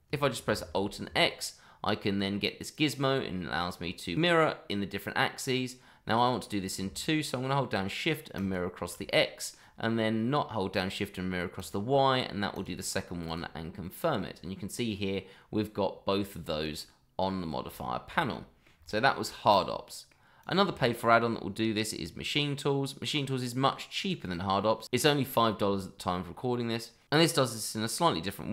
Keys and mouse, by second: 0.6 alt+x, 2.2-3.6 middle drag, 8.3 shift+click, 9.1-9.5 middle drag, 11.5 click, 12.5 click, 13.2 click, 13.8-14.1 middle drag, 17.8-18.1 shift+middle drag, 18.3-18.6 middle drag, 18.8-19.1 shift+middle drag, 19.8 middle drag, 20.4 click, 20.7 shift+middle drag.